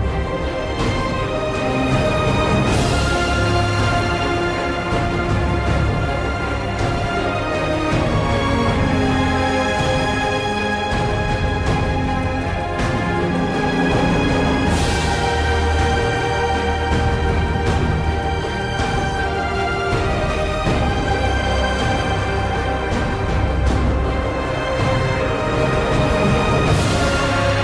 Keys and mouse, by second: 0.0 alt+shift+middle click, 0.3 shift+middle click, 0.5 alt+shift+middle click, 0.8 click, 1.0 alt+middle click, 1.8 alt+shift+KP_3, 1.8 middle click, 2.1 alt+shift+middle click, 2.2 shift+middle click, 2.4 alt+shift+middle click, 3.1 click, 3.9 click, 5.3 click, 5.5 alt+shift+middle click, 5.8 shift+middle click, 6.0 alt+shift+middle click, 6.3 alt+shift+middle click, 6.4-6.8 alt+middle drag, 6.9 alt+shift+middle click, 7.0 alt+middle click, 7.2 alt+middle drag, 7.7 shift+click, 7.8 middle click, 8.0 alt+shift+middle click, 8.3 middle click, 8.5 alt+middle click, 8.9 click, 9.5 alt+shift+middle click, 10.1 alt+middle click, 10.2 KP_3, 10.8 ctrl+r, 10.8 alt+shift+middle click, 11.1 alt+shift+middle click, 11.9 click, 12.2 shift+middle click, 12.4 alt+shift+middle click, 12.6 alt+shift+middle click, 12.8 alt+shift+middle click, 13.5 click, 14.5 click, 15.0 click, 15.4 click, 15.6 alt+shift+middle click, 15.8 alt+shift+middle click, 16.9 click, 17.0 alt+shift+middle click, 17.3 click, 17.6 alt+shift+middle click, 18.4 click, 18.7 shift+middle drag, 19.3 KP_7, 19.4 alt+shift+middle click, 19.5 alt+shift+middle click, 19.7 alt+shift+middle click, 19.8 alt+shift+middle click, 19.9 alt+shift+middle click, 20.6 alt+shift+middle click, 21.0 alt+shift+middle click, 21.4 KP_7, 21.8 click, 22.8 click, 23.2 alt+shift+middle click, 23.4 alt+shift+middle drag, 23.5 click, 23.7 alt+shift+middle click, 23.9 alt+shift+middle click, 24.1 alt+shift+middle click, 24.8 click, 25.1 drag, 25.7 shift+s, 26.2 click, 27.0 alt+shift+middle click, 27.1 shift+middle click.